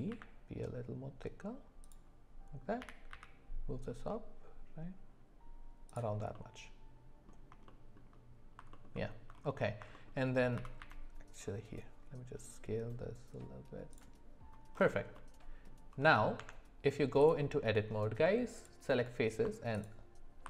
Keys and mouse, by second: 2.8 g, 6.3-7.3 middle drag, 7.7 shift+middle click, 8.7 alt+middle click, 8.9 alt+middle click, 9.9 shift+middle click, 10.6 s, 15.1 middle click, 16.4 Tab, 18.5 click, 19.7 alt+click.